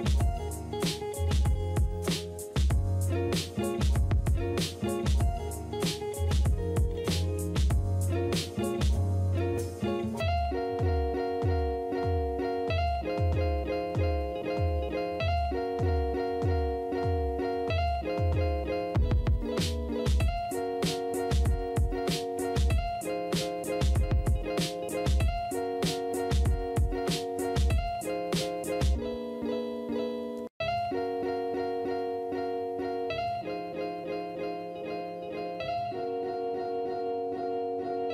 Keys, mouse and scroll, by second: 1.1 ctrl+d, 1.9 right click, 3.7-5.3 typing, 19.7 -, 20.1 Return, 34.8 space, 37.4 space.